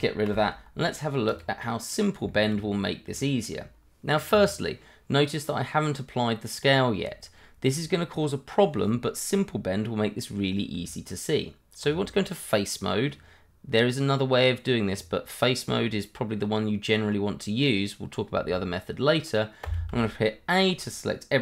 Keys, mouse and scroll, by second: 0.3 Delete, 1.3 click, 1.6 middle click, 2.3 shift+middle click, 2.3 middle click, 2.6-3.2 scroll up 1, 3.2 shift+middle click, 3.3 middle click, 3.4 shift+middle click, 10.7 Tab, 19.6 a.